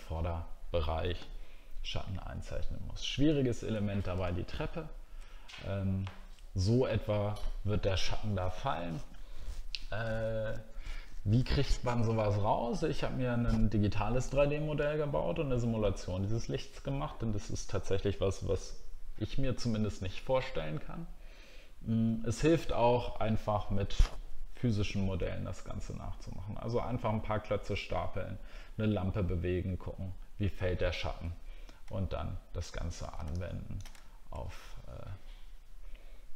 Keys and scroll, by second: 4.2 alt+scroll up 1, 4.9 alt+scroll up 1, 31.8 alt+scroll down 1, 34.0 alt+scroll down 3.